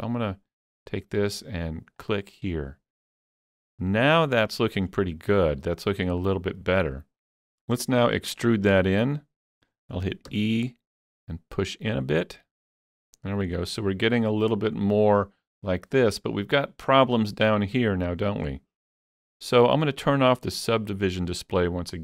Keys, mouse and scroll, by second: 3.0-5.3 middle drag, 3.0 click, 4.9 scroll up 2, 6.2 shift+middle click, 7.7 middle click, 7.7 scroll down 1, 8.4-12.5 shift+middle drag, 10.3 e, 13.1 click, 13.6-16.7 middle drag, 18.5 click, 18.5 middle click, 18.5 scroll up 1, 19.0 middle click.